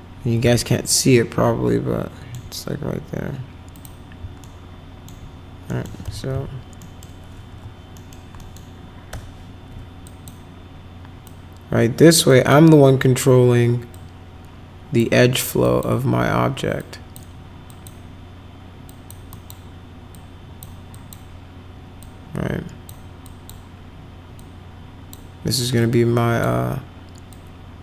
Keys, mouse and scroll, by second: 0.6-2.3 alt+middle drag, 3.7 click, 4.4 alt+middle click, 5.7 middle click, 6.0 f, 6.3 z, 6.8 middle click, 7.5 w, 7.9 middle click, 8.3 middle click, 9.1 1, 10.0 click, 11.2 click, 12.3 click, 13.9-15.0 drag, 15.1 middle click, 15.6 click, 16.8 click, 17.7 click, 18.9 click, 19.3 click, 20.1 click, 20.9 click, 22.0 click, 23.2 click, 24.3 click, 25.8 click, 27.3-27.8 drag.